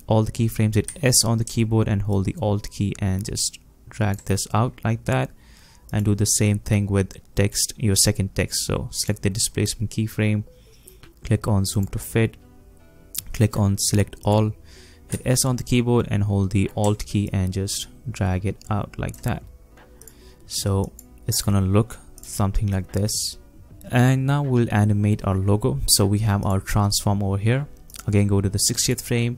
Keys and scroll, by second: 0.9 s, 1.5 alt+s, 15.2 s.